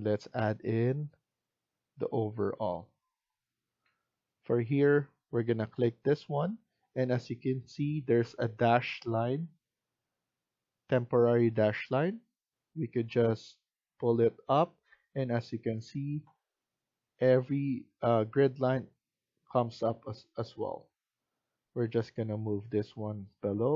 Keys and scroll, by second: 3.7 Escape, 4.0 Escape.